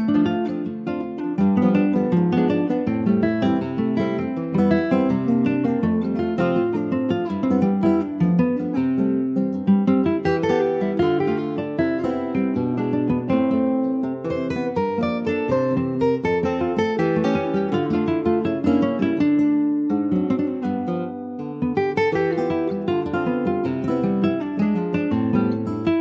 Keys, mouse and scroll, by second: 0.1-0.6 shift+scroll up 3, 0.6 shift+middle click, 0.9-1.5 scroll up 1, 1.5 ctrl+s, 1.9-2.2 scroll down 3, 2.6 shift+middle click, 3.4 shift+d, 4.8 click, 7.7-8.1 scroll up 1, 8.1 shift+middle click, 8.5-10.1 shift+scroll up 4, 10.1 click, 11.5 scroll down 2, 12.0 shift+middle click, 12.7-13.0 scroll down 2, 13.4-14.5 shift+middle drag, 14.5-15.0 scroll up 1, 15.0 click, 15.5 ctrl+s, 15.5 click, 15.9-17.0 middle drag, 17.0 ctrl+s, 17.1 click, 17.3 shift+middle click, 18.1 ctrl+s, 18.2 click, 18.5 shift+a, 19.8 scroll up 2, 20.0 alt+middle click, 20.7 alt+middle click, 21.6 ctrl+s, 21.8 scroll down 2, 22.0 shift+middle click, 22.6 s, 24.1 click, 25.1 scroll up 3, 25.5 shift+middle click.